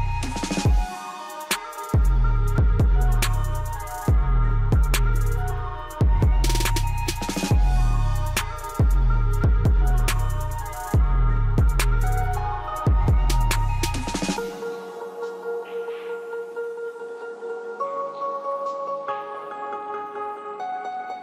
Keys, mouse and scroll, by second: 0.7-6.1 drag, 6.1 ctrl+right click, 7.7-15.5 drag, 15.5 ctrl+right click, 17.3-17.7 scroll up 1, 19.5 scroll down 1, 20.9 click.